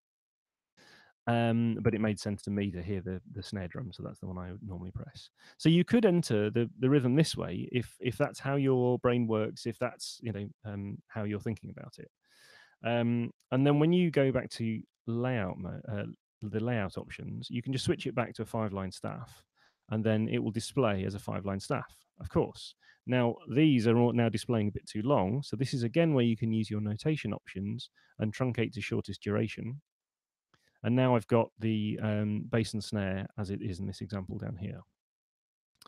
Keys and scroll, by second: 0.7 Escape, 13.9 shift+super+l, 25.3 shift+super+n.